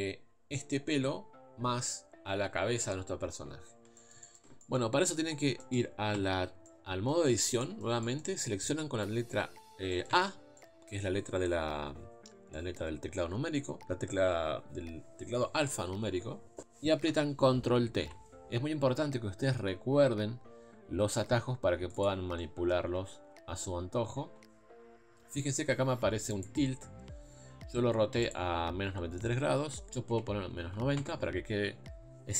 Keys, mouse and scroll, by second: 4.0-6.1 shift+middle drag, 6.1 Tab, 6.7-10.1 middle drag, 10.1 a, 10.6-18.1 middle drag, 18.1 ctrl+t, 22.4 middle click, 23.1 KP_1, 30.9-32.3 drag.